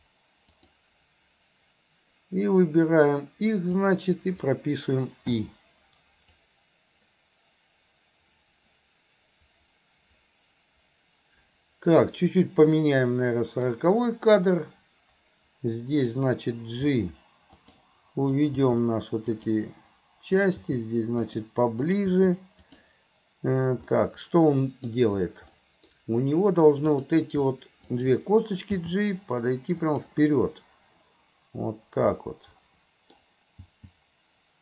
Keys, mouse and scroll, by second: 3.8-4.6 drag, 6.4-13.8 drag, 15.9 click, 18.3 click, 20.4 click, 21.8 click, 24.0-26.9 middle drag, 26.9 click, 27.9 click, 32.2-34.6 middle drag.